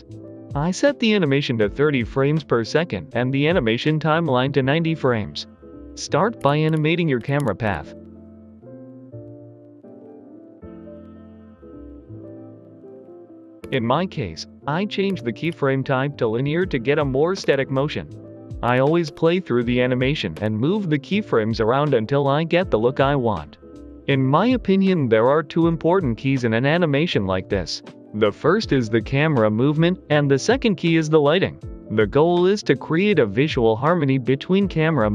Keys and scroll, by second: 6.3-7.3 typing, 7.5 Return, 9.7-10.4 typing, 10.0 Escape, 15.3 t, 22.1 g, 22.3 x, 24.1 g, 27.1 typing, 27.2 Return, 30.1 g, 30.2 x, 31.2-31.9 typing, 34.1 g, 34.3 x, 34.7 0.